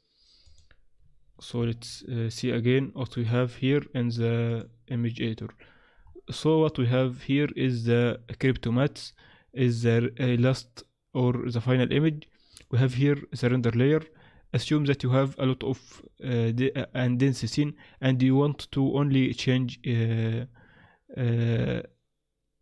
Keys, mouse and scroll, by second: 0.4 click, 1.6 shift+F3, 3.1 click, 4.6 click, 6.0 scroll up 5, 7.0 scroll down 3, 7.0-7.6 scroll down 1, 7.6-8.1 scroll up 2, 8.1-8.7 scroll down 3, 8.7-9.3 scroll up 1, 9.3-9.7 scroll up 2, 10.2 scroll down 2, 11.0 scroll up 2, 11.6-12.1 scroll down 2, 12.5 click, 14.6 scroll up 2, 16.0-17.4 scroll down 2, 17.4-17.7 scroll down 1.